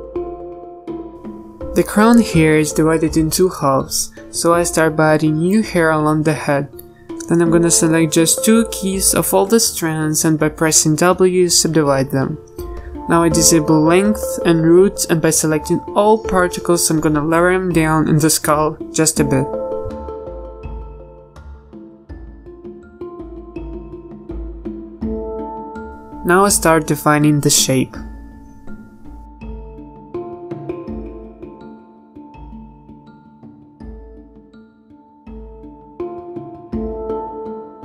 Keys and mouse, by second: 0.0 n, 0.5 n, 1.1-2.7 middle drag, 3.9 middle click, 7.0 middle click, 7.3 a, 9.1 a, 9.3 z, 9.6 c, 11.9 w, 13.6 a, 13.8 a, 18.1 g, 19.0 s, 19.4 g, 21.3 g, 21.9 z, 24.7 KP_1, 25.6 z, 33.1-34.8 middle drag, 36.8 KP_Enter, 36.8 z, 37.1 KP_3.